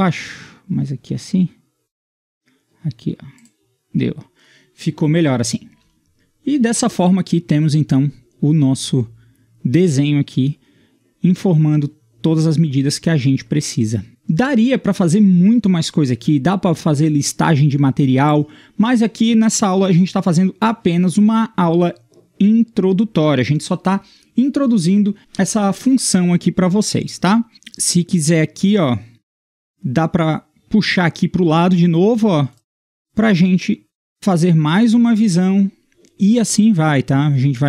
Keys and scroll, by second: 29.1 Escape, 34.0 Escape.